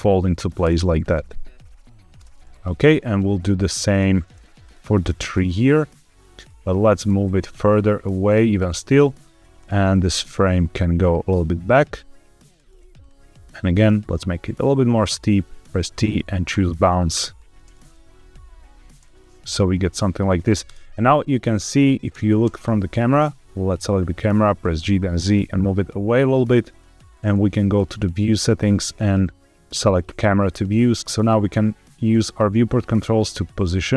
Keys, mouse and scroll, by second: 0.5 space, 2.1 space, 3.1-4.0 drag, 4.5 click, 6.1 click, 6.9 g, 7.1 x, 8.1 click, 8.7 click, 9.3 g, 9.5 y, 9.8 x, 12.4 click, 12.9 click, 13.2 click, 14.9 click, 15.5 t, 17.0 click, 17.4 space, 18.8 space, 19.4 click, 19.9 middle drag, 20.5 KP_0, 21.2 scroll down 1, 22.0 space, 22.3 space, 22.8 click, 23.9-24.3 scroll down 2, 24.5 g, 24.7 z, 26.6 click, 27.6 click, 29.9 click, 30.8 middle click, 31.0 shift+middle click, 31.0 scroll up 1, 31.3 middle click, 32.1 scroll down 1, 32.5 shift+middle click, 32.9-33.3 shift+scroll down 2, 33.4 shift+middle click.